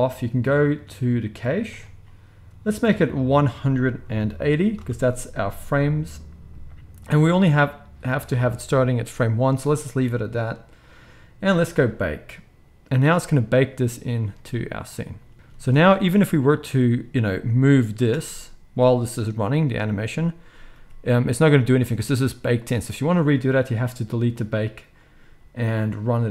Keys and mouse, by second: 1.7-10.8 drag, 10.8-11.7 middle drag, 11.7-16.2 drag, 15.3 ctrl+s, 15.6 ctrl+s, 16.2-22.6 middle drag, 18.1 space, 20.7 g, 22.6 click, 22.6-26.3 middle drag.